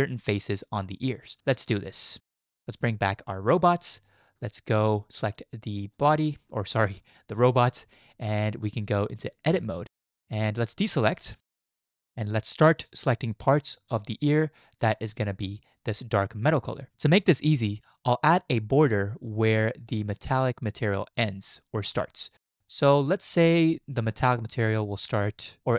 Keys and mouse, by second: 1.8 shift+middle drag, 3.4 click, 4.1-4.7 shift+drag, 5.9 click, 9.5 Tab, 13.1-13.8 shift+drag, 22.7 shift+click.